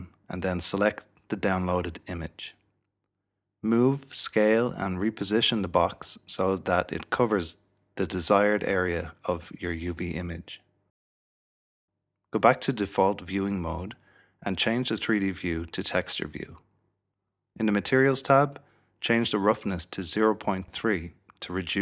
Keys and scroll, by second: 1.0-3.0 typing, 9.7 typing, 12.2 typing, 12.2 Escape.